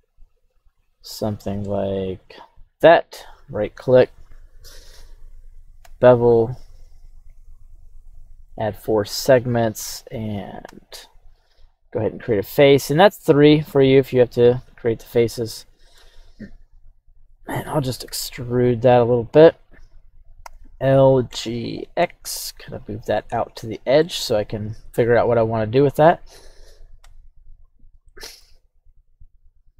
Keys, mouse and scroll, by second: 11.6 click, 12.8-14.6 drag, 15.0-16.1 middle drag, 19.2-20.4 drag, 19.2 e, 20.4 l, 21.3 g, 21.8 x, 22.7 click, 23.2 middle click, 23.7 scroll down 1, 24.0 middle click, 24.5-24.9 scroll down 1, 25.4 middle click, 27.0 KP_3, 27.6-27.9 scroll up 3, 28.1 shift+middle click.